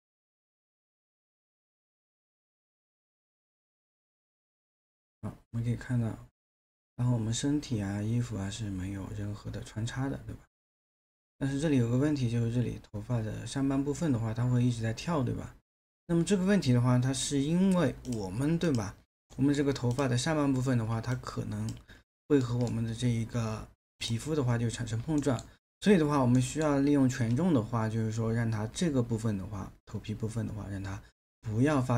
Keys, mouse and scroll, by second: 19.3 alt+middle click, 22.3 space, 25.2 alt+middle click, 26.4 alt+middle click.